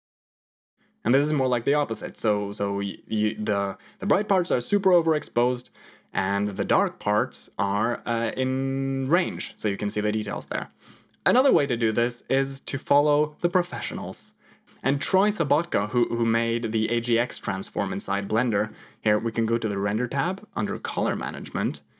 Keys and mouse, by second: 10.3 click, 13.6 m, 18.2 middle click, 20.5 click, 21.0 middle click.